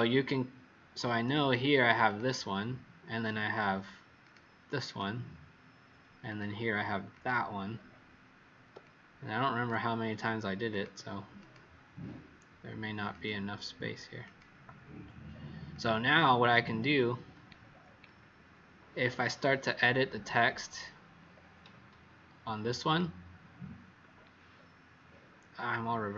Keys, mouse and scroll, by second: 1.2 w, 2.0 click, 4.8 click, 6.2 click, 8.8 click, 10.6 click, 11.3 click, 13.0 click, 15.8 click, 17.5-18.3 alt+scroll down 4, 18.9 alt+scroll down 1, 21.3-21.7 alt+scroll, 22.8 click, 24.4 alt+scroll down 1, 25.4-25.9 alt+scroll up 2.